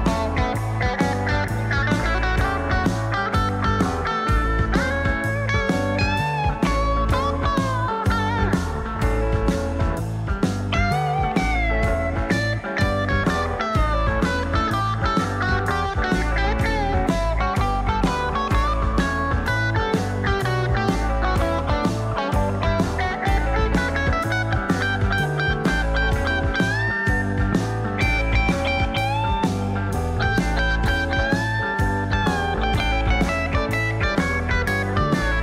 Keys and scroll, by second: 12.2 ctrl+shift+f, 18.0-21.1 typing, 21.4 Return, 26.8-30.0 typing, 31.1 ctrl+a, 31.5-32.5 typing.